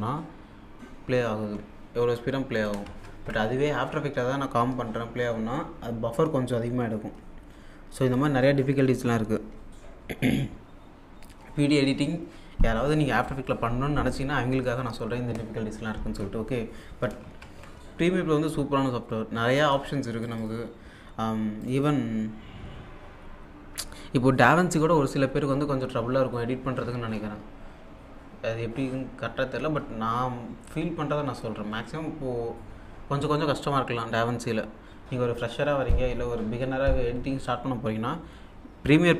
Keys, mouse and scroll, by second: 2.6 click, 2.9 alt+Tab, 17.1 alt+Num_Lock, 17.2 alt+Tab, 20.2 click, 21.7 click, 28.8-29.5 scroll down 1, 30.6 scroll up 1.